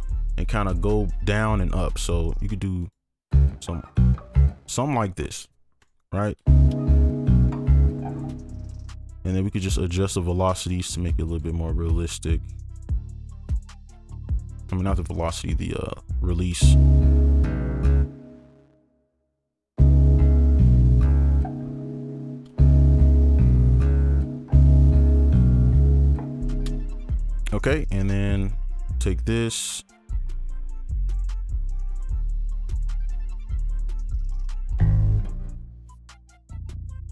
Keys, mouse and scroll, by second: 3.3 double click, 4.7 ctrl+click, 6.4 right click, 8.2 space, 8.8 ctrl+click, 10.9 right click, 10.9 alt+click, 12.1 alt+click, 14.2 alt+click, 16.6 right click, 18.0 space, 19.3 alt+click, 20.1 alt+click, 21.9 ctrl+click, 22.2 alt+scroll down 2, 23.0 right click, 24.1 alt+click, 24.3 space, 24.9 space, 25.3 right click, 27.8 space, 27.9 ctrl+click, 28.3 shift+click, 29.4 right click, 30.0 alt+click, 30.8 right click, 31.6 ctrl+click, 32.6 shift+click, 35.0 right click, 35.4 alt+click, 35.7 alt+right click, 36.8 ctrl+click.